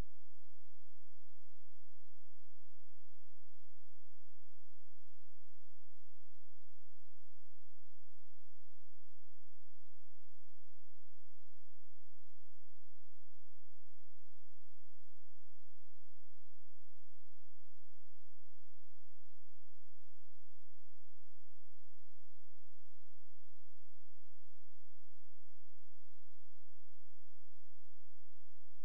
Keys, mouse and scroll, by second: 0.4 click, 1.7-2.0 scroll down 1, 2.0-2.8 scroll up 1, 2.8 click, 5.6-6.1 scroll down 1, 6.1-7.1 scroll up 1, 7.1 click, 7.2 click, 9.2 scroll down 1, 9.4-10.2 scroll up 1, 10.2 click, 16.6-17.9 scroll up 1, 17.9 click, 18.8 Delete, 19.6 click, 22.0 scroll down 1, 22.7 scroll up 1, 25.0 click, 28.0-28.8 scroll down 1.